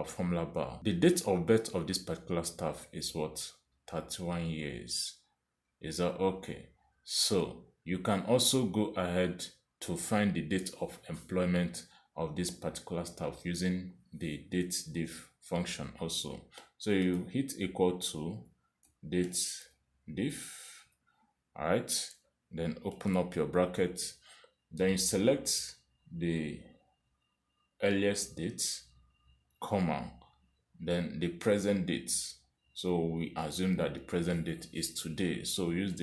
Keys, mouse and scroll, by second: 8.4 Escape, 8.9 Escape, 14.7 click, 18.1 typing, 19.4-21.8 typing, 23.9 shift+9, 28.9 click, 30.7 ,.